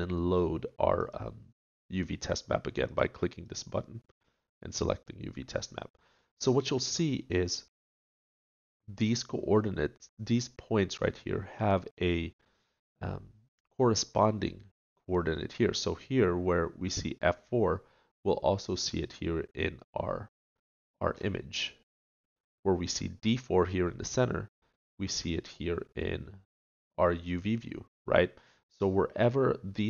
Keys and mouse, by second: 1.2-5.2 drag, 5.2 middle click, 21.3 click, 21.7-23.4 middle drag.